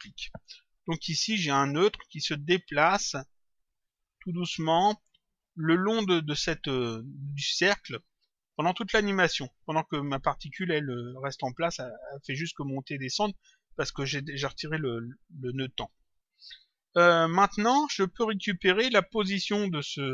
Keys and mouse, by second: 0.9 click, 2.4 click, 15.4 click, 16.4 click, 20.0 click.